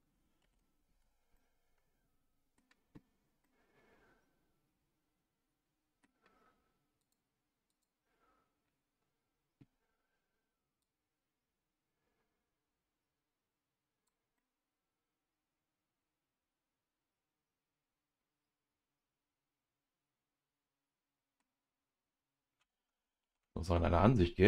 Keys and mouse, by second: 0.4 ctrl+z, 1.3-2.6 middle drag, 3.4-6.0 middle drag, 7.0 click, 7.8 click, 14.4-21.4 middle drag, 23.2 ctrl+z.